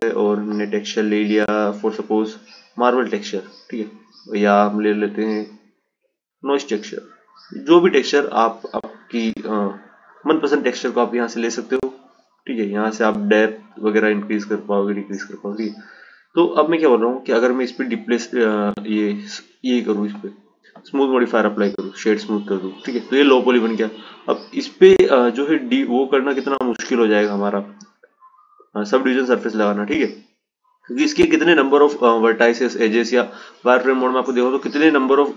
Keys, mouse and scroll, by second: 0.2-6.4 drag, 6.8-9.8 drag, 12.5-18.0 drag, 19.5-22.3 right drag, 22.3 click, 24.8 click, 28.6-29.7 drag, 32.3 click, 32.8 click.